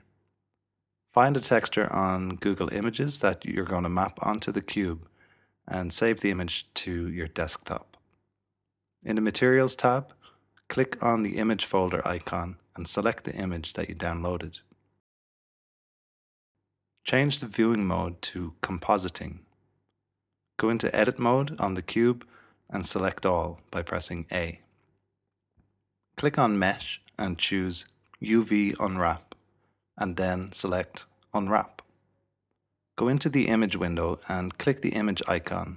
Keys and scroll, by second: 16.4 typing, 22.0 Tab, 23.1 typing, 34.3-35.1 typing.